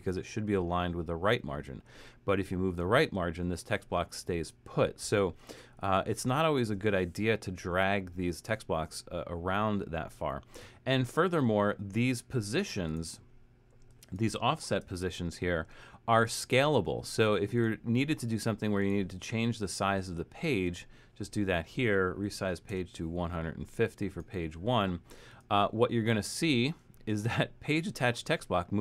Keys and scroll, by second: 4.4 super+z, 14.9 ctrl+shift+Return, 22.0-23.1 typing.